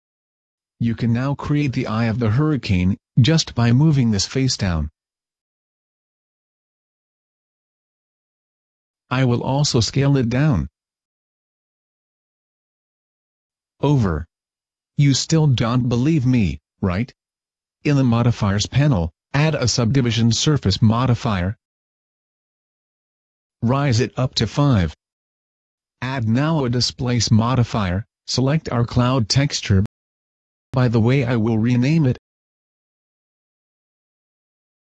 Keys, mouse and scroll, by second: 1.0 a, 2.5 click, 3.8 right click, 4.4 KP_Decimal, 5.1-5.7 scroll down 12, 5.9 middle click, 6.3-6.8 scroll up 4, 6.8 KP_5, 7.7 scroll down 2, 8.0 click, 10.3 alt+right click, 11.3 o, 11.9 s, 13.8 click, 14.6 click, 15.3 s, 15.7 click, 16.0 Tab, 16.0 a, 16.3 middle click, 21.9 click, 22.4 middle click, 23.5 click, 23.7 click, 23.9 click, 24.1 click, 27.1 click, 27.7-28.0 scroll up 1.